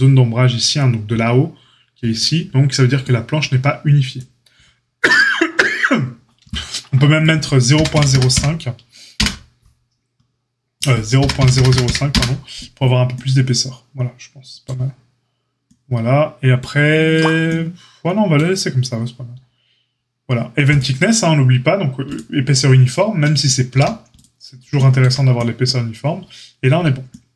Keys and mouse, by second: 11.6 KP_0, 20.7-22.0 middle drag, 22.0 click, 22.1-27.3 middle drag, 23.7 a.